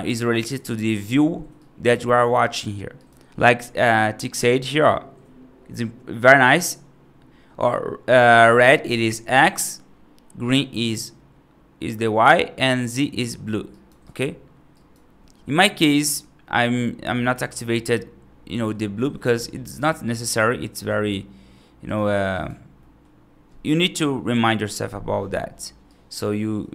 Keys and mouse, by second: 1.5 right click, 2.8 right click, 3.3 middle click, 13.6 right click, 13.9 right click, 14.6 right click, 17.4 click, 18.4 middle click, 19.2 right click, 22.0 click, 22.2 right click, 22.7 middle click, 25.7 right click.